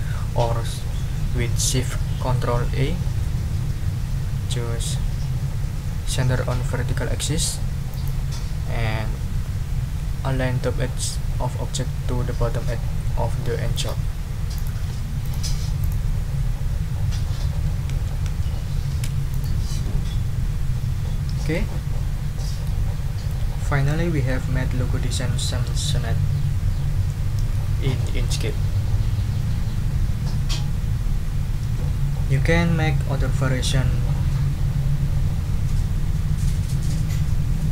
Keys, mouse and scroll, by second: 7.9 click, 13.7 click, 14.5 click, 15.2 click, 15.8 click, 17.5 shift+Down, 19.3 shift+click, 21.5-22.8 ctrl+drag.